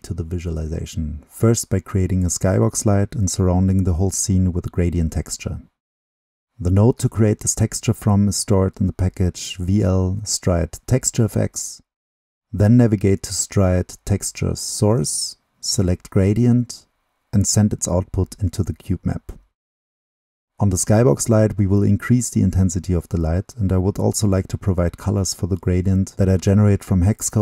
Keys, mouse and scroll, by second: 0.6-3.5 drag, 4.0-7.3 drag, 7.3-8.1 right drag, 8.1-9.8 drag, 10.5-12.2 drag, 12.6-18.7 drag, 22.3 middle click, 22.6 click.